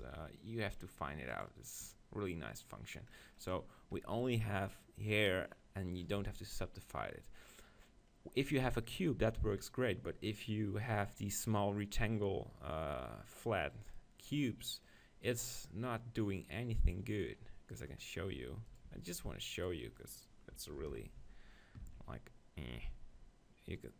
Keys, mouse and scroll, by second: 0.0 t, 1.3-3.2 drag, 1.9-3.2 right drag, 3.2 middle click, 4.0 Tab, 6.2 Tab, 11.4-13.2 right drag, 14.0-16.0 middle drag, 17.8 right click, 18.3 Tab, 18.6 Tab, 18.9 Tab, 20.8 ctrl+l, 21.9 ctrl+b.